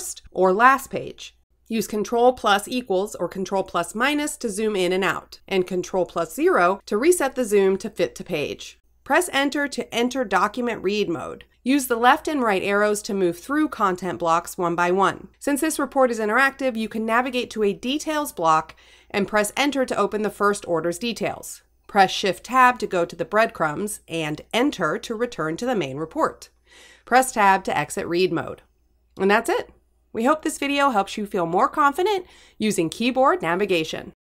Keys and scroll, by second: 2.1 ctrl+-, 4.7 ctrl+=, 6.6 ctrl+0, 8.6 Return, 11.5 Right, 19.5 Return, 25.7 shift+Tab, 27.7 Return.